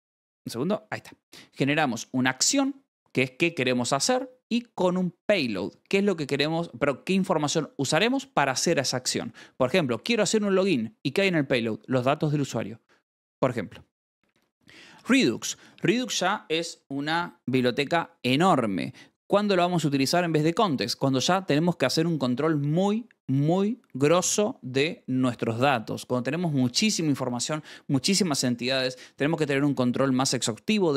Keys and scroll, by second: 0.0 a, 0.8 Escape, 1.0 k, 1.2 ctrl+s, 1.5 j, 14.4 j, 14.9 shift+v, 15.3 Escape.